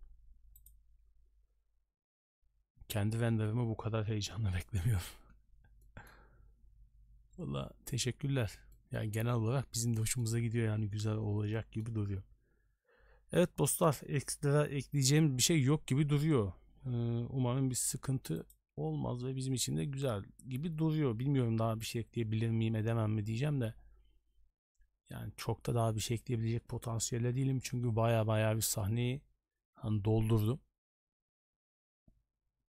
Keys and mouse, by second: 5.8 middle click, 8.7-9.0 middle drag, 10.0 middle click, 11.5 middle click.